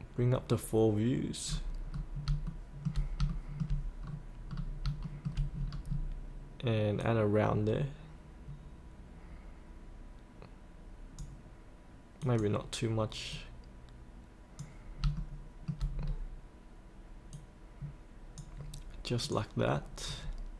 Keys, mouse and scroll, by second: 1.4-2.3 scroll up 1, 2.4 shift+middle click, 3.3 shift+middle click, 4.0-4.3 scroll down 1, 5.0 shift+middle click, 5.5-7.0 scroll down 1, 7.0-15.0 drag, 15.1 shift+middle click, 16.0 scroll down 1, 17.4-18.6 drag, 19.6 click.